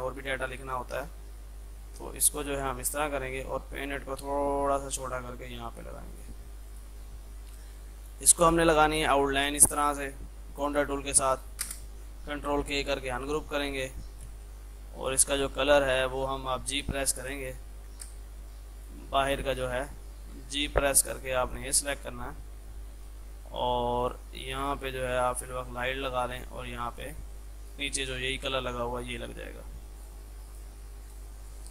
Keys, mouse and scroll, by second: 11.7 space, 12.5 ctrl+k, 12.9 click, 14.1 ctrl+z, 14.5 F3, 15.1-16.8 drag, 16.8 g, 17.1 click, 17.8 ctrl+z, 18.1 space, 18.9 click, 19.7 ctrl+z, 20.4 g, 21.5 click, 24.0-30.0 drag, 30.0 click.